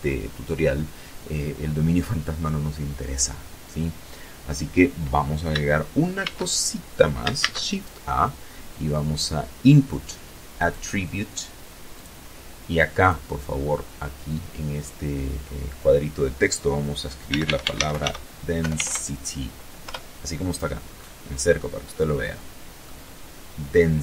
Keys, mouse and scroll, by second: 4.3 shift+a, 5.5 shift+a, 8.6 click, 10.0 click, 11.1 click, 15.1-16.8 typing, 17.9 Return, 19.0-19.6 scroll up 2, 19.7 scroll up 2, 20.1-21.1 middle drag.